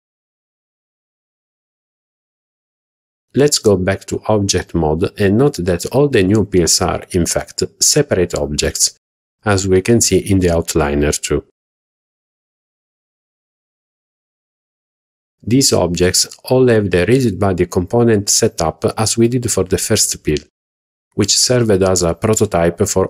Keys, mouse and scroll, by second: 3.5 a, 5.4 Tab, 7.0 click, 7.8 click, 8.3 scroll down 2, 8.4 scroll up 1, 8.6 scroll down 2, 8.7 scroll up 1, 9.0 shift+middle drag, 9.6 click, 10.2 click, 10.7 click, 13.3 click, 15.9 click, 16.7 click, 17.6 click, 18.2 click, 20.2 click.